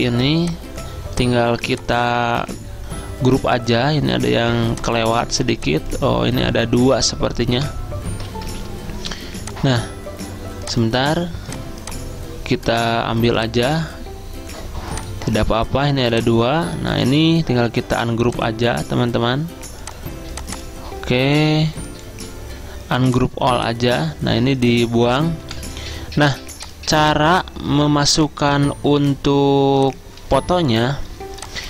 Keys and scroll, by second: 0.1 ctrl+g, 2.3 ctrl+z, 7.6 Delete, 8.4 ctrl+z, 25.5 End, 28.6 Delete.